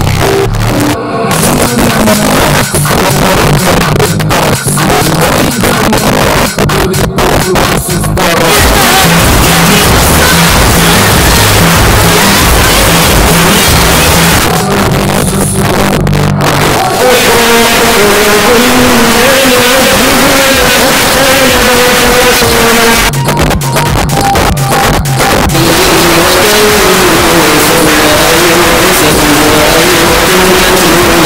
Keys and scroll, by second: 3.7 Down, 3.8 Down, 4.0 Down, 4.1 Down, 4.3 Down, 4.4 Down, 5.1 Return, 14.4 Page_Down, 22.9 Page_Down.